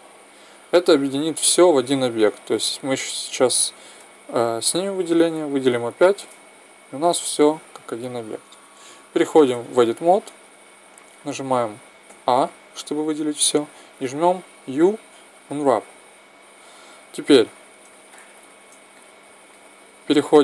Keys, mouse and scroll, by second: 2.8-3.8 drag, 3.9 middle click, 4.5 a, 6.4-6.9 drag, 6.4 g, 6.9-7.4 middle drag, 7.7 middle click, 9.4 Tab, 11.2 a, 11.9 a, 14.5 u.